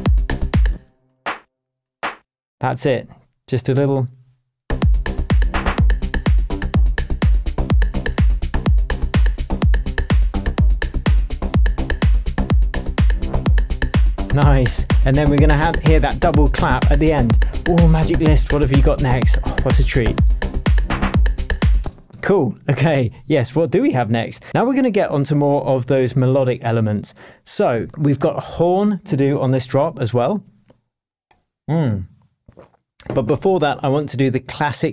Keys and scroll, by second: 0.7 space, 1.7 space, 5.2 shift+Tab, 21.8 space, 22.2 super+s.